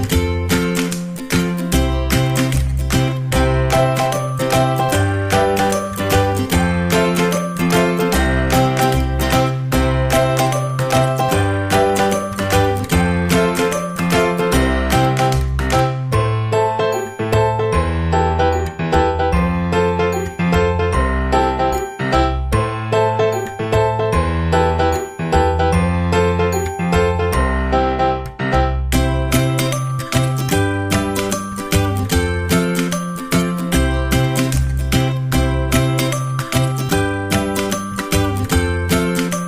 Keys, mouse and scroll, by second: 0.3-2.1 drag, 3.0-6.1 middle drag, 7.2-8.8 drag, 9.7-11.7 middle drag, 14.5-17.8 middle drag, 17.9-20.5 middle drag, 20.5-20.9 scroll up 1, 20.9-22.8 middle drag, 22.5 scroll down 1, 22.8 scroll up 1, 23.0-24.7 middle drag, 25.9-27.8 drag, 28.5-30.3 drag, 29.5-31.8 middle drag, 31.3-33.2 drag, 31.9-34.2 middle drag, 36.5-38.4 middle drag.